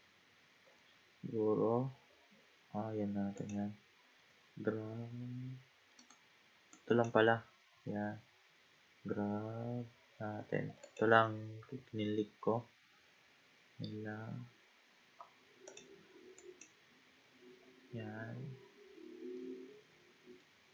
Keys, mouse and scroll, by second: 4.1 g, 6.7 click, 7.7 g, 12.3-12.9 scroll up 1, 12.9-14.0 scroll up 1, 14.0-14.8 scroll down 1, 14.8-15.7 scroll down 1, 15.7 click, 16.4 click, 19.4-20.7 middle drag.